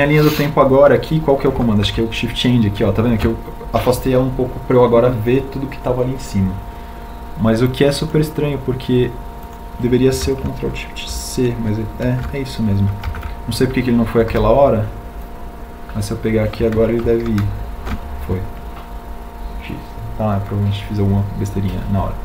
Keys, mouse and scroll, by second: 5.1 shift+End, 14.5 ctrl+alt+shift+c, 16.5 ctrl+z, 18.2 b, 20.8 ctrl+alt+shift+c.